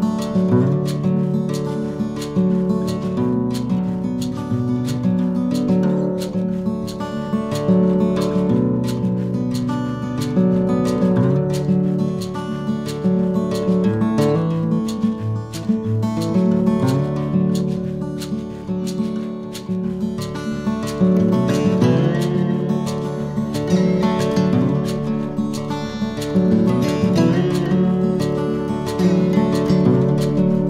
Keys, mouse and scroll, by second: 1.3 KP_3, 1.9 Tab, 2.8 right click, 4.0 t, 4.9 click, 5.3 t, 5.9 click, 9.4 a, 9.7 a, 10.1 w, 12.6 click, 14.0 click, 15.3 right click, 16.0 click, 19.0 right click, 20.1 shift+right click, 20.9 click, 24.0 a, 24.3 a, 25.3 click, 28.9 a, 29.6 KP_7, 30.2 a.